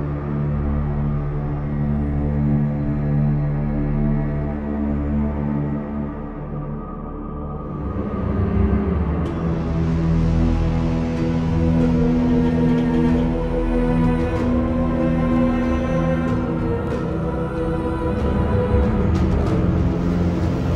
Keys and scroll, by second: 0.0-1.1 typing, 11.9 ctrl+i, 11.9-13.5 typing, 14.7 ctrl+z, 15.4 ctrl+shift+z, 15.7-16.5 typing, 19.4 v.